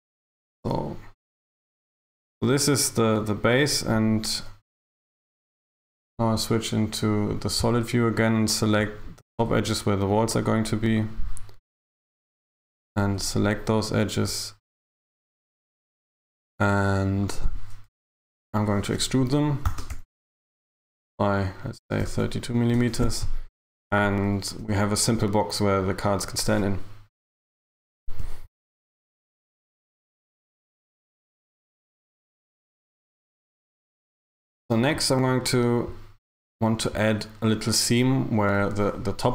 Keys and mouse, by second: 0.3 a, 0.6 a, 4.9 z, 7.1 click, 8.9 right click, 10.2 ctrl+right click, 11.0 right click, 12.9 ctrl+right click, 15.2 ctrl+right click, 17.3 ctrl+right click, 17.9 KP_1, 19.8 e, 20.0 g, 24.7 Tab.